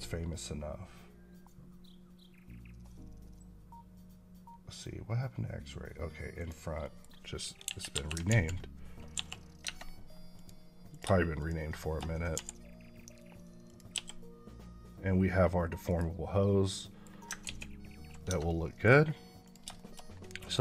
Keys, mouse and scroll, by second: 0.8 click, 6.2 click, 6.7 middle click, 7.5 KP_1, 7.8 KP_5, 8.1 alt+z, 9.0 KP_5, 9.5 Tab, 10.2 click, 11.2 shift+click, 11.6 shift+middle click, 12.0 scroll down 2, 12.2 r, 13.5 click, 13.8 g, 15.7 right click, 16.7 middle click, 17.3 ctrl+z, 18.3 middle click, 18.9 scroll up 2, 19.3 click, 19.6 shift+middle click, 19.9 scroll down 1, 20.1 middle click, 20.5 scroll up 1.